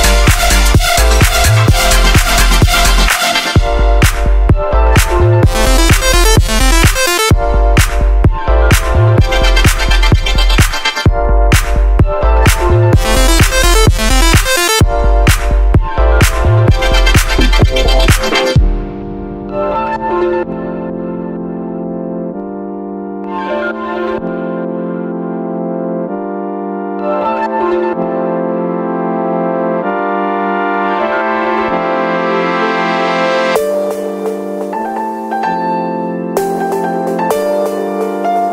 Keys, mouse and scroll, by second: 11.8 super+z.